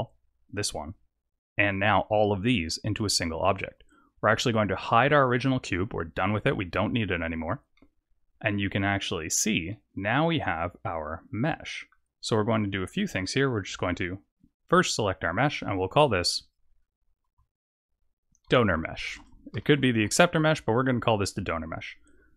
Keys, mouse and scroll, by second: 6.9 click, 7.7 middle click, 9.6 middle click, 12.2 click, 13.2 middle click, 16.2 click, 16.4 click, 22.1 click.